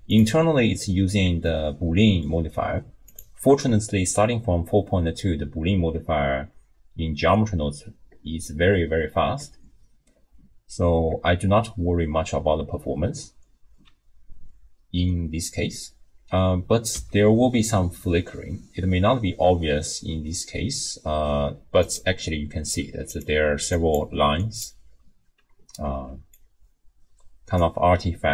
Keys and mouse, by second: 0.1 click, 1.4-2.1 drag, 2.1 middle click, 17.0 r, 23.1 click, 23.4-25.2 d, 23.7 click, 24.4 click, 26.0-27.9 d, 26.3-27.6 drag.